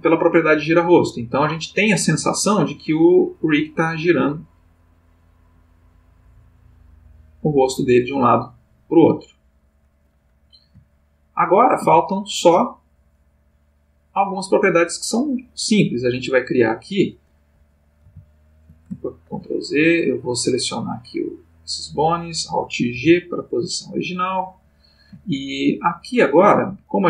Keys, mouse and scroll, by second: 1.2 click, 2.3-10.1 drag, 10.9-11.9 ctrl+middle drag, 12.0-12.6 ctrl+shift+middle drag, 13.2 click, 16.6-17.3 drag, 18.0 alt+g, 19.2 ctrl+z, 20.5 click, 21.4-22.2 drag, 22.9 alt+g.